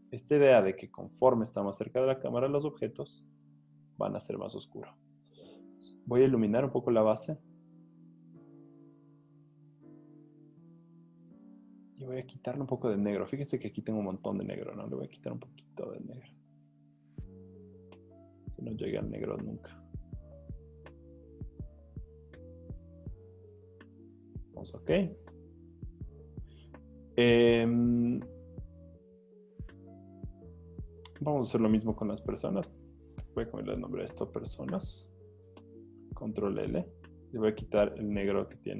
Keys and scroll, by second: 6.2 super+l, 24.7 z, 25.6 z, 33.6-34.9 typing, 36.1 super+l.